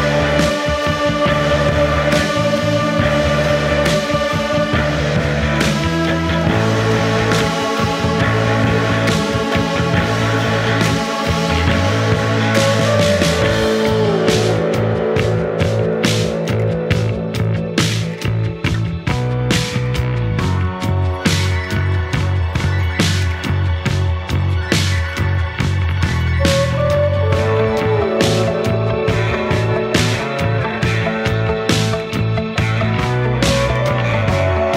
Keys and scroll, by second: 0.8 Delete, 1.2 Delete, 4.2 Delete, 5.1 Delete, 5.9 Delete, 6.9 Delete, 7.9 F1, 18.6 F1, 21.4 ctrl+d, 21.5 Escape, 22.8 ctrl+z, 27.5 F1.